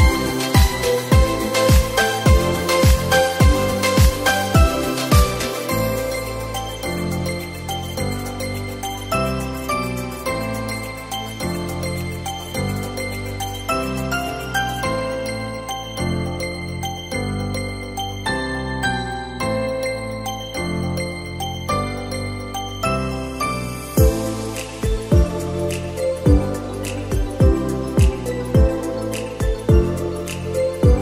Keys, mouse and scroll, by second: 0.1-1.3 scroll down 1, 1.3-4.5 drag, 4.7 click, 6.5 click, 7.3 scroll down 2, 8.2 click, 9.5 x, 10.7 shift+a, 18.5-19.1 scroll down 4, 19.1 KP_7, 19.9-21.1 scroll down 7, 21.1 s, 22.5 g, 23.8-26.6 middle drag, 26.6 r, 28.3-29.5 middle drag, 29.5 KP_7.